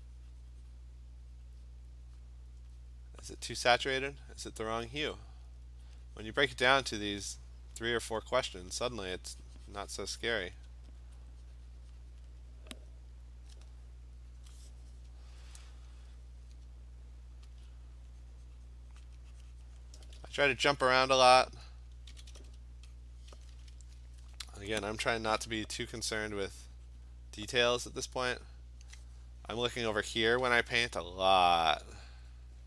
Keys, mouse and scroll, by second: 1.4 click, 1.7 click, 2.2 click, 2.6 click, 2.8 click, 3.2 alt+click, 3.5 click, 3.8 click, 4.2 click, 4.5 click, 5.6 alt+click, 7.8 click, 8.5 alt+click, 9.9 click, 10.6 click, 10.7 alt+click, 11.0 alt+click, 12.2 click, 12.6 click, 12.8 click, 12.9 alt+click, 13.3 click, 13.6 alt+click, 14.4 click, 17.6 alt+click, 17.6 alt+click, 19.1 click, 19.8 click, 22.1 alt+click, 22.1 ], 22.3 ], 22.5 ], 23.0 click, 23.2 click, 26.1 alt+click, 26.2 alt+click, 27.1 click, 27.8 click, 31.0 alt+click, 32.0 click, 32.2 click, 32.4 click, 32.6 click.